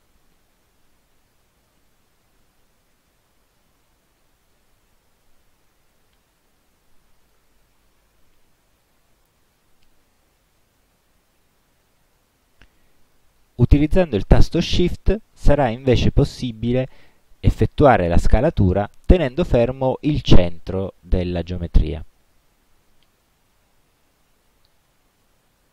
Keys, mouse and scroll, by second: 3.5 ctrl+click, 4.6 ctrl+click, 5.4-7.6 ctrl+drag, 16.8-25.5 shift+drag.